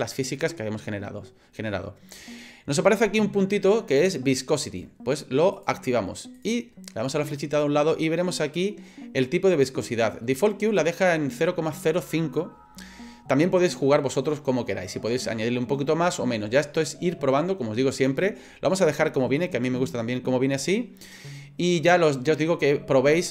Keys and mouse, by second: 5.6 click, 6.4 click.